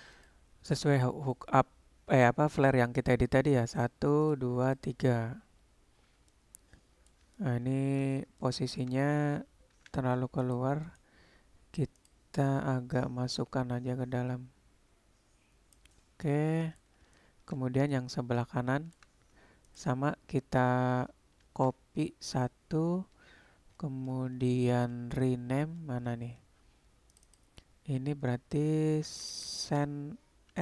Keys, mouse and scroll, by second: 0.2 click, 3.8 click, 4.7 click, 6.5 middle click, 7.4-8.0 shift+middle drag, 8.5 shift+middle click, 8.6 shift+click, 12.0 click, 13.5-15.9 drag, 16.1-16.8 middle drag, 17.2-17.6 shift+middle drag, 17.9-19.0 shift+middle drag, 19.7 click, 21.6 shift+d, 27.4-30.6 drag.